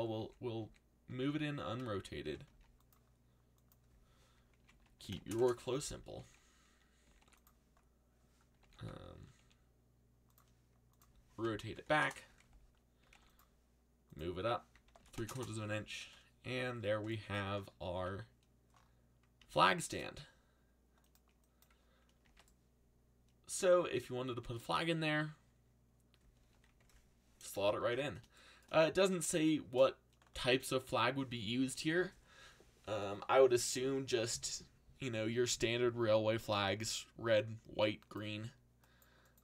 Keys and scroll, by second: 0.2 ctrl+z, 0.6 ctrl+z, 1.0 ctrl+z, 1.9-2.9 typing, 4.3-5.7 typing, 6.8-7.7 typing, 8.6 ctrl+z, 9.3 r, 11.3-16.4 typing, 17.9 a, 19.4 alt+a, 22.2 alt+a.